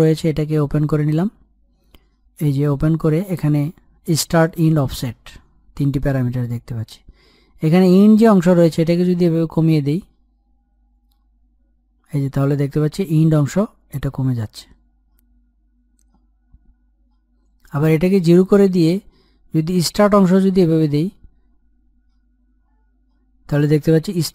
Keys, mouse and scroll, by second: 2.3 scroll down 1, 8.0-18.0 drag, 19.5-24.3 drag.